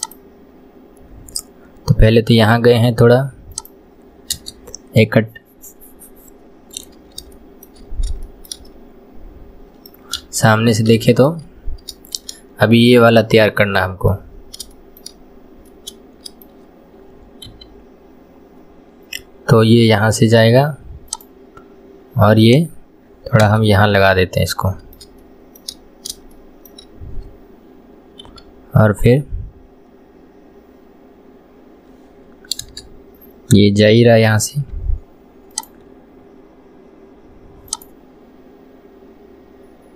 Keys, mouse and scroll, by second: 4.9-6.0 scroll down 1, 6.3-6.8 scroll up 2, 7.3 shift+scroll up 1, 7.4 shift+middle click, 7.9 scroll down 2, 8.3-10.2 shift+middle drag, 10.2 KP_1, 11.0 shift+middle click, 11.5-12.0 scroll down 1, 12.0-14.4 shift+middle drag, 14.4-14.8 scroll up 2, 14.8 shift+middle click, 15.3-15.7 scroll up 1, 15.7-17.5 middle drag, 17.5 k, 23.9-28.3 middle drag, 28.3 k.